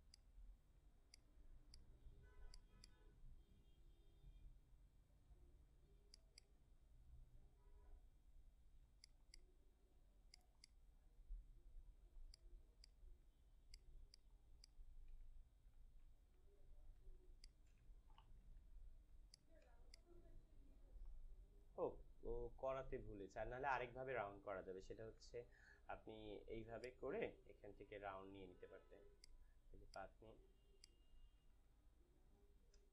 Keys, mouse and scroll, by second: 6.1-10.3 alt+drag, 10.3-12.2 alt+drag, 12.7 alt+click, 13.6 alt+click, 15.5 ctrl+d, 16.3 ctrl+-, 17.0 space, 17.2 click, 17.5 space, 18.1 ctrl+=, 19.2 ctrl+click, 19.6 space, 19.9 click, 20.1 space, 24.5 space, 25.0 d, 26.8-29.8 drag, 30.7 shift+click.